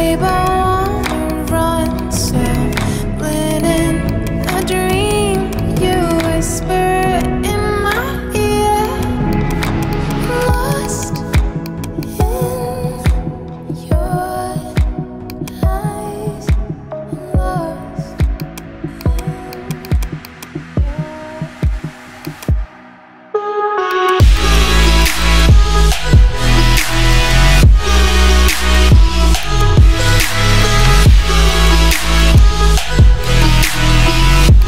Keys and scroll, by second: 23.4 ], 32.7 ].